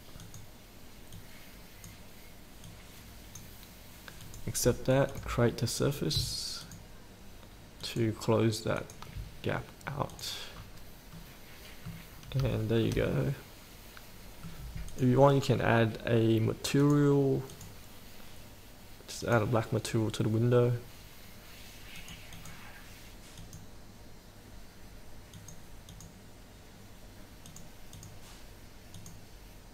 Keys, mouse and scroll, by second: 6.1 click, 6.8 ctrl+click, 8.0 ctrl+click, 9.0 ctrl+click, 10.3 click, 10.7 scroll up 1, 11.6 middle click, 12.3-12.7 scroll up 1, 12.8 shift+middle click, 13.3-15.1 middle drag, 15.1-22.5 drag.